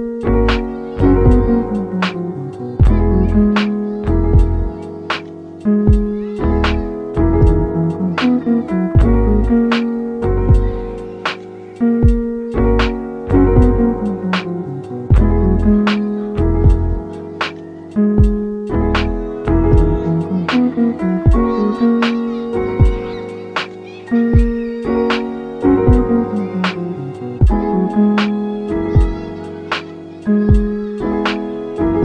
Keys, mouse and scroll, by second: 0.6-1.1 scroll up 2, 1.1-3.1 middle drag, 3.1-6.5 drag, 6.5-10.3 middle drag, 10.3 g, 10.7 z, 15.6 click, 16.0 middle click, 16.3 a, 16.7 s, 18.3 click, 18.6-21.4 middle drag, 21.4-22.3 scroll down 2, 22.3 scroll down 1, 22.5 middle click, 23.1 e, 26.2 click, 27.5 s, 27.8 z, 28.3 0, 28.6 Return, 30.9 shift+middle click, 31.3 g, 31.7 z.